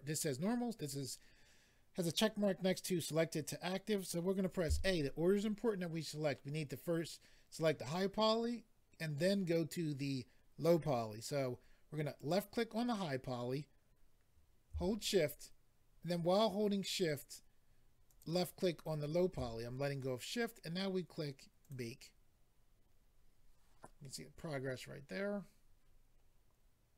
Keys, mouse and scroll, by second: 12.1 click, 18.0 shift+click, 18.2 shift+click, 21.6 click, 21.7 click.